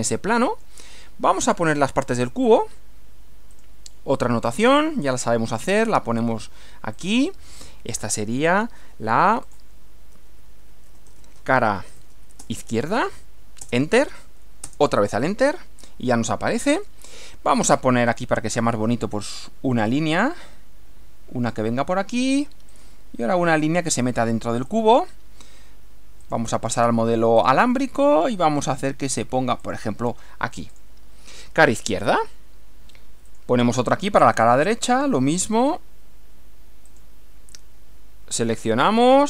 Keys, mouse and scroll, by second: 0.2-0.8 middle drag, 1.4 click, 3.6 click, 7.0 click, 8.0 click, 9.4 click, 10.3-12.9 typing, 13.6 Return, 14.6 Return, 16.8 click, 18.1 click, 19.9 click, 21.5 click, 22.7 click, 24.7 click, 26.2 click, 27.4 click, 29.6 click, 30.7 click, 33.3 click, 36.9 click, 38.7 click.